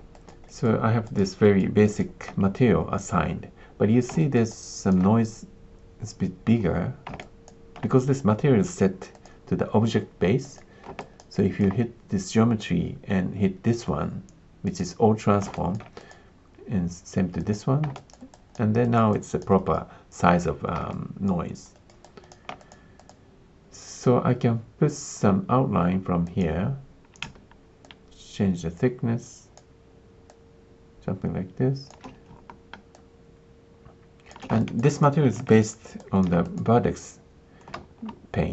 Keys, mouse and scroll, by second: 0.1 alt+click, 0.4 alt+click, 1.0 alt+click, 1.4 alt+click, 1.8 alt+click, 4.2 alt+click, 4.4 alt+click, 7.1 alt+click, 9.1-10.5 drag, 10.9 alt+click, 11.3 alt+click, 14.6 click, 15.5 alt+click, 16.0 click, 17.4 click, 17.9 alt+click, 18.3 alt+click, 18.8 alt+click, 19.1 alt+click, 19.5 alt+click, 20.9 alt+click, 21.7 alt+click, 22.0 alt+click, 22.5 click, 22.9 click, 26.5 click, 27.9-29.5 shift+drag, 30.2-31.8 shift+drag, 32.9-34.3 shift+drag, 34.6 alt+click, 34.9 click, 35.4 alt+click, 35.9 alt+click, 36.4-37.6 drag, 37.7 ctrl+space.